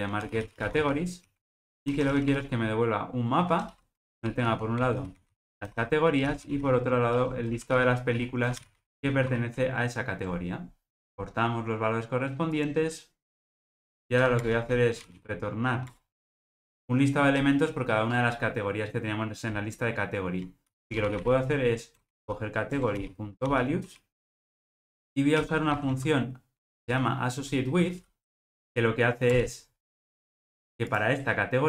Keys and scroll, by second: 11.0 alt+Return, 15.9 Return, 22.8 Return, 28.5 Return.